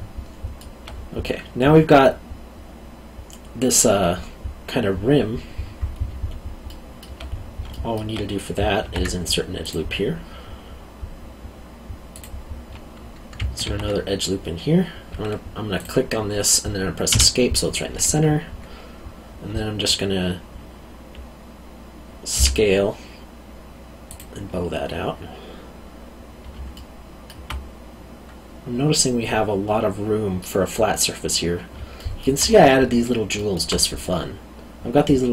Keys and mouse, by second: 6.6 alt+middle click, 7.7 alt+middle click, 8.8 ctrl+r, 9.6 click, 12.1 click, 13.6 ctrl+r, 15.8 click, 17.1 Escape, 22.3 s, 24.1 click, 26.7 alt+middle click, 31.9 alt+middle click, 33.3 alt+middle click.